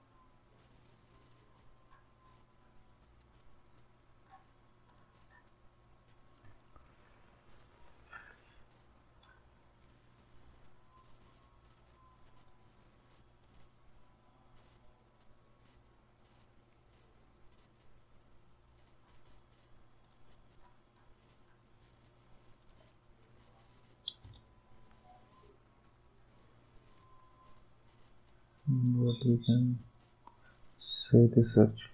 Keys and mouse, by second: 12.4 click, 20.0 click, 22.6 click, 24.2 Return.